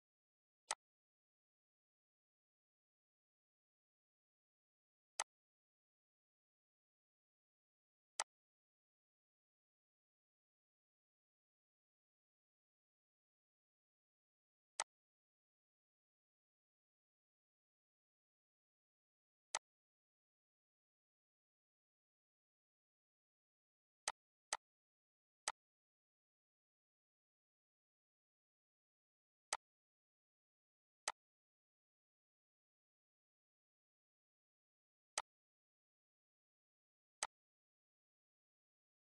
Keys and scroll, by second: 9.0 -.